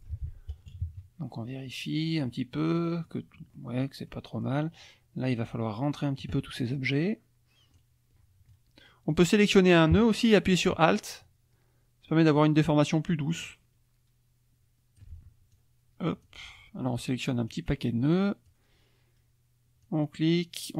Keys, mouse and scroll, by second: 0.7 KP_Subtract, 1.8 click, 2.8 click, 3.5 scroll down 1, 3.5 click, 4.1 click, 5.3 click, 6.7-7.9 drag, 9.1-15.2 drag, 15.5 alt+click, 17.5-18.7 drag, 19.8-20.7 drag.